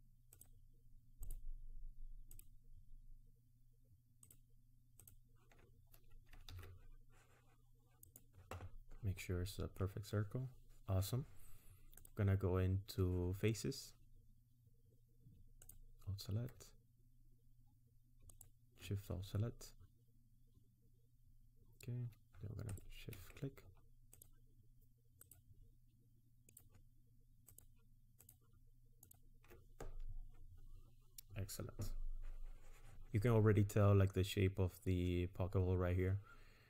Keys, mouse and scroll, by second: 0.3 ctrl+click, 1.3 ctrl+click, 2.3 ctrl+click, 4.3 ctrl+click, 5.0 ctrl+click, 6.5 alt+shift+s, 9.2 middle click, 12.0 click, 15.6 alt+click, 18.3 alt+shift+click, 22.7 shift+click, 24.2 ctrl+click, 25.2 ctrl+click, 26.5 ctrl+click, 27.5 ctrl+click, 28.2 ctrl+click, 29.0 ctrl+click.